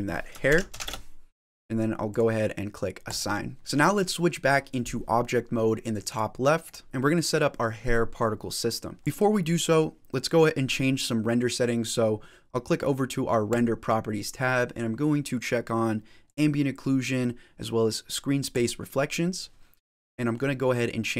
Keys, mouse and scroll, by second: 2.9 click, 3.6 middle click, 5.9 click, 6.8 click, 8.9 click, 9.0 middle click, 9.0-9.5 scroll down 5, 9.6 scroll down 1, 13.3 click, 16.1 click, 18.4 click, 20.0 middle click.